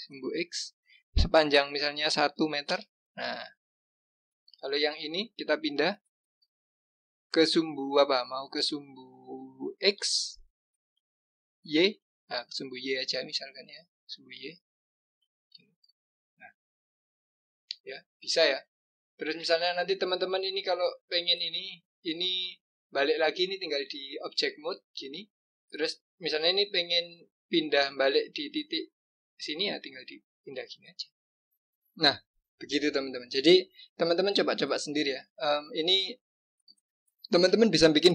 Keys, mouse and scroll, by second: 4.8 click, 6.4 g, 15.7 click, 16.9 click, 23.3-26.4 drag, 26.5 g, 31.8 scroll up 2, 32.3 scroll down 2, 32.9-33.7 scroll up 2, 35.1 click, 37.7-38.1 scroll down 3.